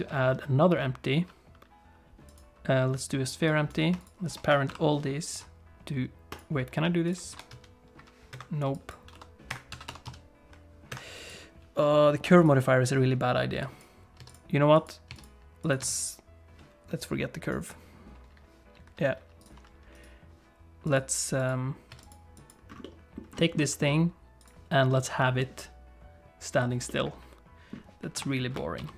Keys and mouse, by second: 3.5 click, 4.7 ctrl+p, 7.3 r, 8.9 click, 9.1 r, 9.7 a, 9.9 r, 11.2 click, 13.7 click, 14.2 x, 14.8 click, 15.1 x, 15.7 click, 15.8 x, 19.4 click, 19.9 click, 20.9 click, 21.9 x, 22.4 click, 22.8 middle click, 23.4 shift+middle click, 23.6 middle click, 24.4 click, 24.9 middle click, 26.9 middle click, 28.1 KP_7, 28.8 alt+h.